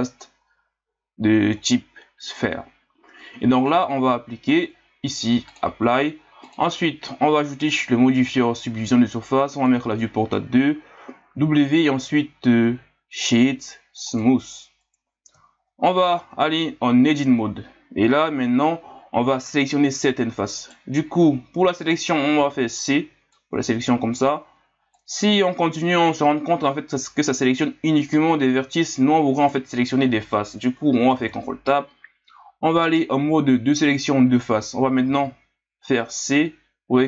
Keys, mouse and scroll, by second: 3.7-6.4 drag, 7.7-11.3 drag, 11.3 w, 15.4 scroll down 2, 15.8 scroll up 2, 16.3 Tab, 18.3-20.6 scroll up 1, 20.6 right click, 22.4 c, 31.2 ctrl+Tab, 35.0 c.